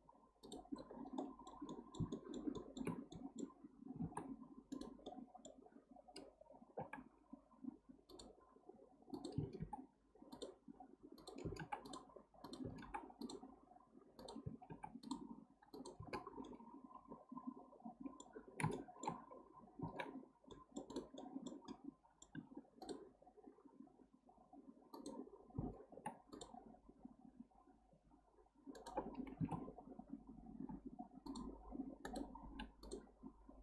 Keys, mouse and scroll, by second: 0.8 scroll up 1, 0.9-1.2 scroll down 1, 1.2-4.0 middle drag, 4.0 ctrl+r, 5.0-6.8 middle drag, 6.8 k, 9.6 k, 14.7 k, 16.4-19.8 middle drag, 19.8 ctrl+r, 21.2-22.3 middle drag, 22.3 k, 30.6 k, 32.4 k.